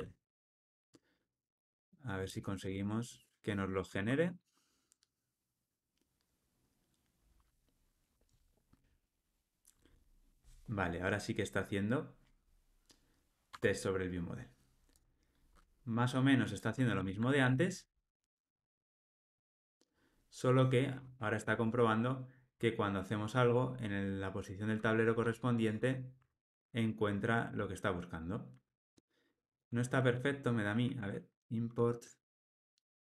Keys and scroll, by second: 0.4 Escape, 13.5 Tab, 16.9 alt+Return, 26.3 alt+Return, 29.4 super+z, 31.4 alt+Return.